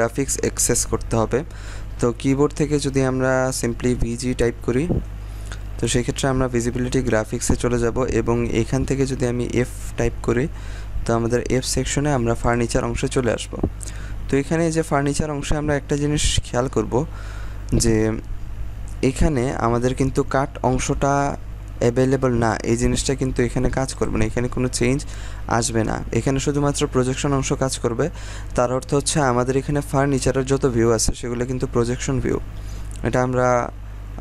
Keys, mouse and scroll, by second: 2.0-2.5 scroll down 1, 2.5 scroll up 1, 5.0 g, 9.4 f, 10.1-10.7 scroll down 1, 12.4 click, 13.8-17.5 drag, 23.9 click.